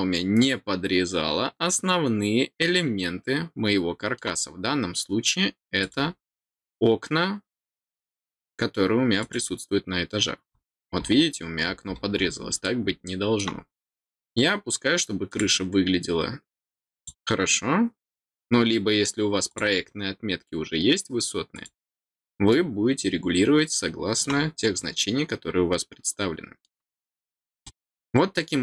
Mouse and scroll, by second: 5.8 click, 9.2 click, 10.5-11.5 scroll down 3, 11.8-12.2 scroll down 2, 12.6 middle click, 15.2 click, 16.9 click, 19.4 click, 21.5 click, 22.5-24.2 middle drag, 24.7-26.6 middle drag, 27.6-28.6 middle drag.